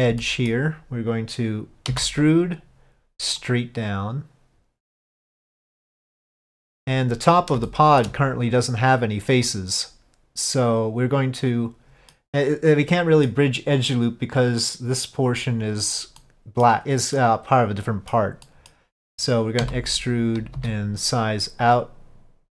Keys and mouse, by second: 0.3 middle click, 3.5-6.7 drag, 7.7 shift+middle click, 9.5-12.3 middle drag, 13.0 middle click, 16.3 middle click, 17.2 middle click, 18.5 middle click.